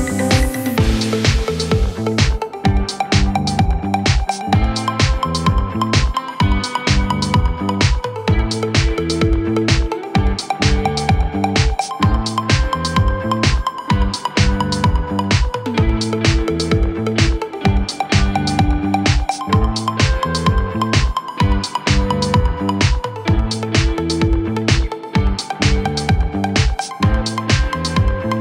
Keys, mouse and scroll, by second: 0.7 middle click, 1.0 middle click, 1.2 scroll up 5, 6.5 middle click, 7.3 scroll down 1, 9.1 middle click, 9.4 scroll down 6, 10.6 space, 10.8 middle click, 11.1 scroll up 3, 11.2 space, 11.5 shift+click, 11.6 shift+click, 11.8 right click, 15.0 scroll up 4, 15.2 middle click, 15.6 scroll up 4, 15.8 middle click, 16.0 scroll down 5, 16.3 scroll up 5, 17.1 r, 19.0 double click, 19.1 right click, 20.0 scroll down 9, 20.3 middle click, 20.9 typing, 22.4 middle click, 22.7 scroll up 5, 22.8-25.1 typing, 25.5-25.9 scroll down 4, 26.4-26.9 scroll up 3, 27.1-27.7 scroll up 1, 27.7 scroll up 3.